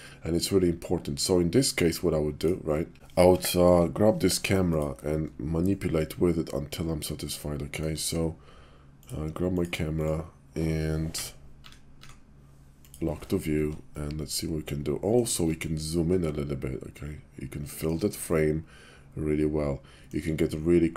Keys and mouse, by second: 2.2 click, 2.9 Page_Down, 3.5 Page_Down, 5.6 shift+click, 6.7-7.8 shift+middle drag, 9.5 click, 11.0 Page_Down, 11.5 Page_Down, 11.9 Page_Down, 13.5-15.2 shift+middle drag, 15.7-17.8 ctrl+middle drag, 18.3-20.0 shift+middle drag.